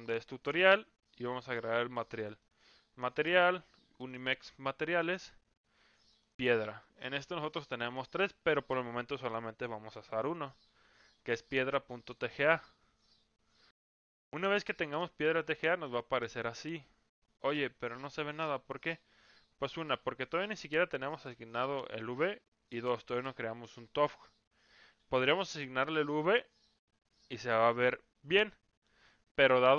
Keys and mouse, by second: 15.4-15.8 middle drag, 16.2-17.8 middle drag, 25.4 click, 27.3-27.8 middle drag, 28.5-28.8 middle drag.